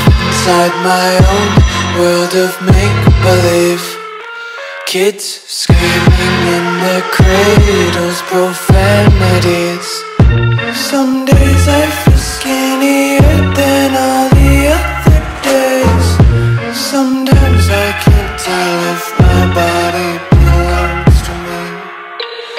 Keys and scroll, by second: 0.4-0.9 typing, 4.7 space, 5.2 alt+super+space, 5.3 alt+super+space, 5.4 alt+super+space, 5.7 alt+super+space, 5.8-6.8 alt+super+space, 6.1-6.4 typing, 6.5 super+space, 6.8 super+space, 7.0 super+space, 7.1 super+space, 7.2 super+space, 7.3 super+space, 7.9 super+space, 10.8 alt+super+space, 10.9-11.3 alt+super+space, 11.4 alt+super+space, 11.5 alt+super+space, 11.6 alt+super+space, 11.6 alt+super+space, 11.7 alt+super+space, 11.9 alt+super+space, 12.0 alt+super+space, 12.0 alt+super+space, 12.1 typing, 14.5 m, 16.4 v, 21.7 u.